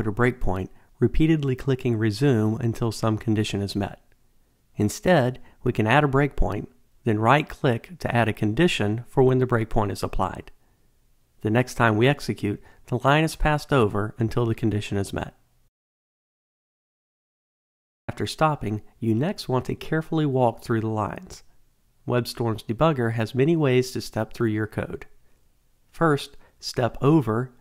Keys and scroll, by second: 26.1 F8.